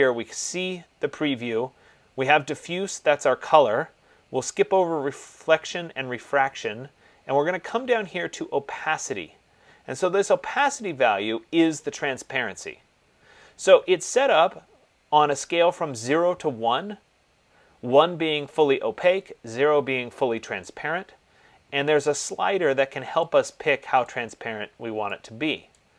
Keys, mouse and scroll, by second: 11.0 click, 24.4 click.